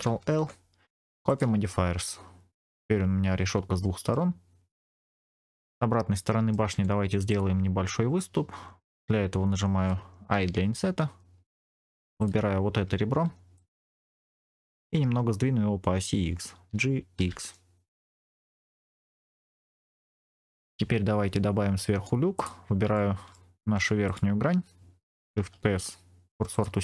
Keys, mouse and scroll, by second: 0.1 ctrl+l, 1.9-4.1 middle drag, 4.3-4.7 scroll down 2, 4.7 middle click, 5.4 click, 6.1 middle click, 6.6 Tab, 7.2 click, 10.2 i, 11.3 click, 12.1 click, 12.8 1, 13.0 2, 13.4 click, 14.2 middle click, 17.1 g, 17.1 x, 18.9 click, 19.4 Tab, 19.9 scroll down 1, 20.1 shift+middle click, 20.1-20.4 scroll up 2, 21.8 Tab, 22.3 click, 22.8 middle click, 23.6 3, 23.9 click, 25.3 shift+s.